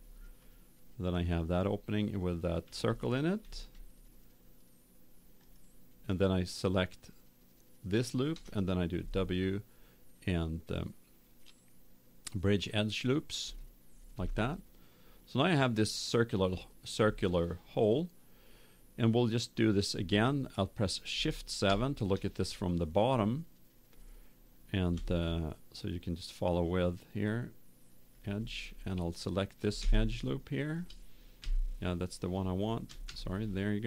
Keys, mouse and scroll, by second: 5.4-7.2 right drag, 8.9 w, 14.3-16.1 middle drag, 24.9 ctrl+Tab, 29.1 right click, 29.9 middle click, 31.0 middle click, 31.3 KP_7.